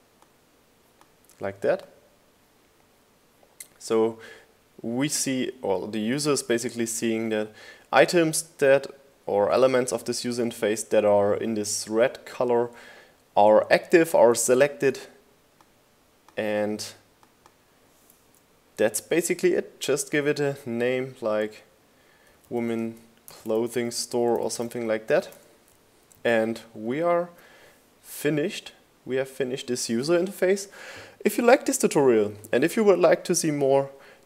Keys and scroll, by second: 21.0-24.6 typing, 27.0 super+s.